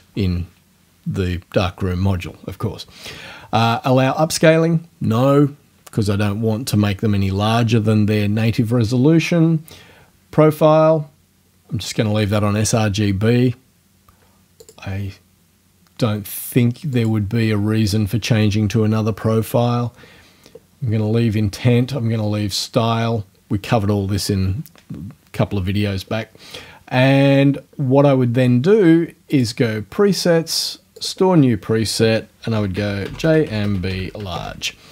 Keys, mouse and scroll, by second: 14.6 click, 17.0 click, 29.3 click, 31.0 click, 32.3-34.9 typing.